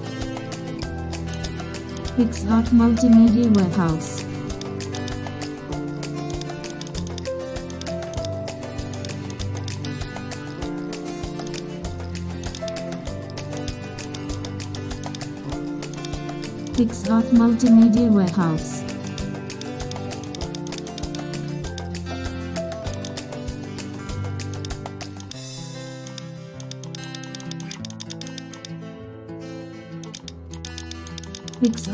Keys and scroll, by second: 0.9 super+e, 3.5 super+space, 7.6 super+space, 13.1 super+0, 14.0 super+space, 17.1 super+c, 17.4 super+n, 17.9 super+v, 18.5 alt+shift+super+f, 21.4 super+d, 21.8 super+0, 22.5 shift+super+F2, 24.9 super+space, 29.3 super+z, 30.0 super+z.